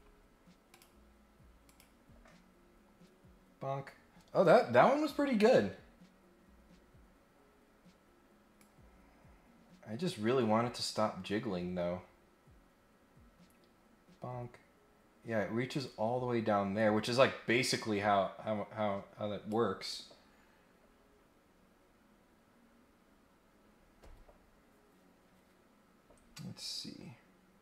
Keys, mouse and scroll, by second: 0.7 click, 1.6 click, 7.5 scroll up 1, 8.6-19.5 drag, 20.9-21.5 scroll up 6.